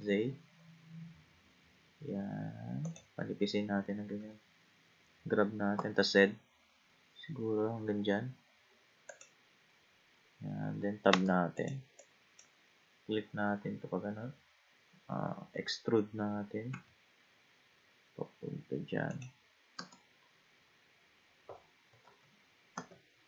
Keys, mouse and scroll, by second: 4.2 g, 11.1 Tab, 11.6 click, 12.0 click, 16.7 e, 19.8 Tab, 22.1 ctrl+z, 22.7 ctrl+z.